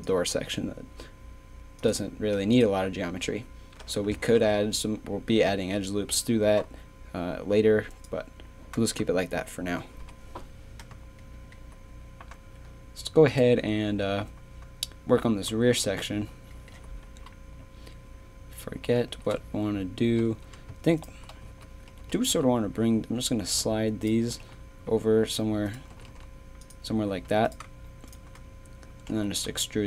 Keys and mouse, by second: 2.5-4.3 drag, 4.3 ctrl+r, 8.0-10.0 drag, 10.0 KP_3, 19.0 z, 21.4 z, 22.2 g, 24.3 g, 25.9 g, 27.1 a, 29.1 e.